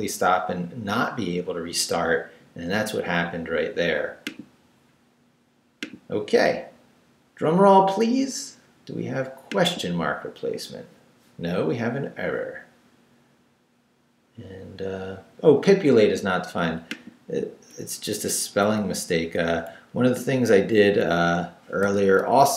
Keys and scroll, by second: 17.9 Down, 19.6 Right, 20.9 Right, 21.8 i, 22.3 BackSpace.